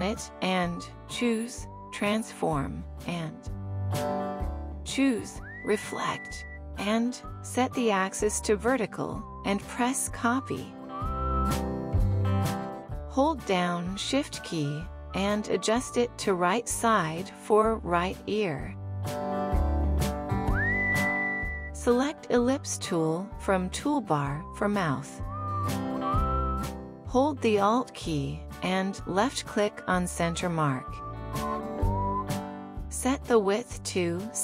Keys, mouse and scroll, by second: 1.6 right click, 31.6 alt+click.